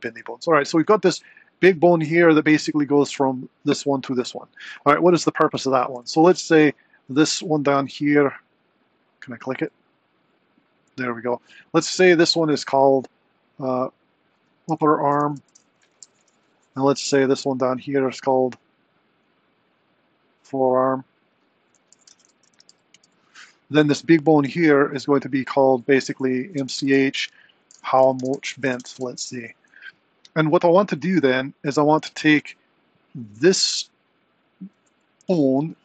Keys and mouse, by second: 0.6 r, 6.7 click, 7.4 click, 8.1 click, 8.7 click, 10.2 click, 14.2-16.6 drag, 15.3 p, 18.2 click, 19.2 click, 21.4-23.3 drag, 24.2 click, 25.8-29.5 drag, 35.3 g.